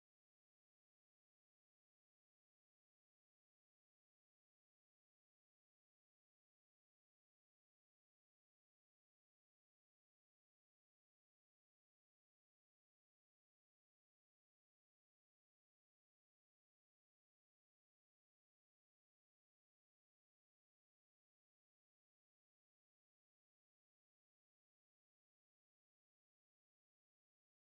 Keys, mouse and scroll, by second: 6.1 click, 9.5 click, 13.1-16.6 drag, 19.9-27.6 drag.